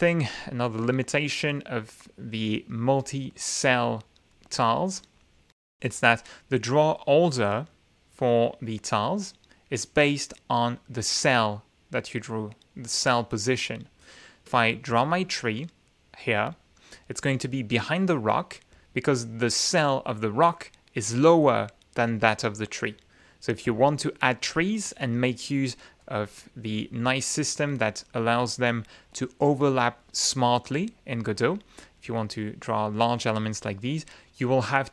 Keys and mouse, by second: 4.3 click, 5.8 ctrl+z, 13.6 click, 15.3 ctrl+z, 16.7 click, 24.0 ctrl+z, 25.6 click, 26.4 click, 27.1 click, 28.2 click, 33.4 click.